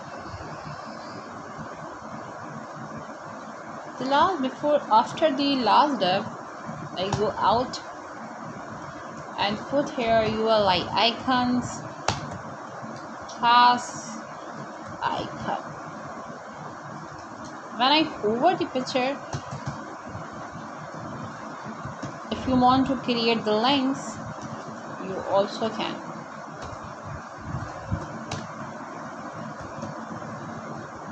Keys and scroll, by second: 0.0-0.4 typing, 1.1 Right, 1.8 shift+., 3.8 Return, 4.8 Up, 5.7-7.0 typing, 8.7 shift+., 9.0 shift+,, 9.2 /, 10.0 BackSpace, 12.1 shift+,, 12.4 a, 12.8 space, 13.8-14.8 typing, 15.8 Return, 16.8 shift+3, 20.3 shift+., 22.6 Right, 23.7 BackSpace, 25.8 shift+', 26.3 Right, 27.3 BackSpace, 28.1 Right.